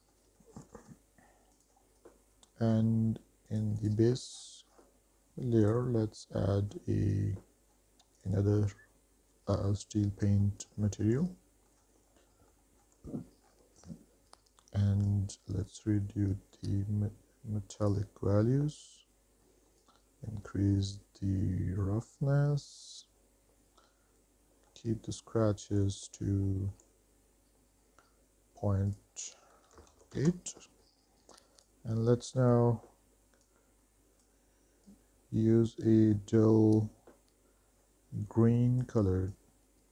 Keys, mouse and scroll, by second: 0.0 middle drag, 0.6 shift+middle click, 0.9 middle drag, 1.7 click, 3.7 click, 4.0 click, 4.6-5.2 scroll down 5, 5.9-8.6 drag, 10.6 middle drag, 11.0 shift+middle drag, 11.4-11.9 middle drag, 12.3 scroll up 2, 12.5 middle click, 12.8 shift+middle drag, 13.7 scroll down 3, 15.3-18.1 drag, 20.0-22.4 drag, 24.1-24.9 middle drag, 25.4 middle drag, 25.7 shift+middle drag, 26.2 scroll down 2, 26.7 shift+middle drag, 29.1-30.4 drag, 31.8 click.